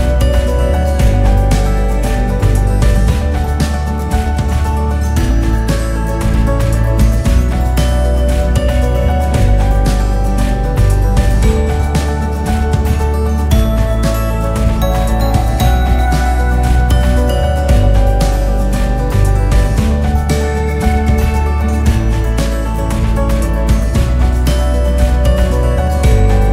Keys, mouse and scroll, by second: 0.7 s, 2.0 e, 3.1 s, 4.9 e, 7.3 s, 9.1 e, 10.6 s, 13.2 s, 16.3 e, 18.7 click, 20.5-21.8 drag, 21.8-22.4 right drag, 22.4 click, 22.9-24.8 KP_6, 25.1-26.5 drag.